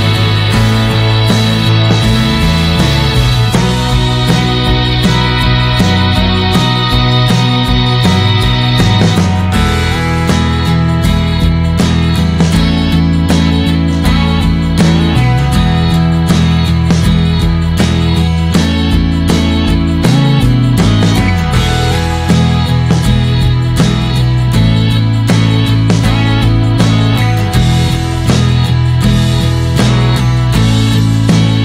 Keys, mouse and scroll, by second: 1.2 middle click, 1.4-2.3 scroll down 2, 2.3-3.6 scroll down 1, 3.6-4.9 scroll down 1, 4.9-9.4 drag, 9.4 scroll down 3, 12.1-20.4 drag, 21.2-23.5 drag.